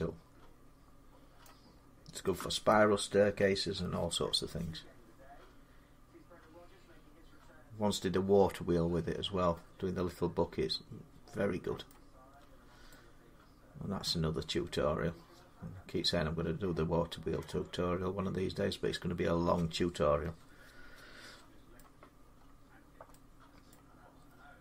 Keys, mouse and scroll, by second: 1.2 middle click, 1.6-2.2 scroll down 4, 3.6 middle click, 4.6 scroll, 4.7 middle click, 11.7 middle click, 12.2 scroll, 14.1 scroll up 1, 16.2 scroll, 16.5 scroll up 1, 21.6 middle click, 22.0 scroll down 1, 22.2 scroll up 2, 22.6-22.9 scroll down 2, 23.5 middle click.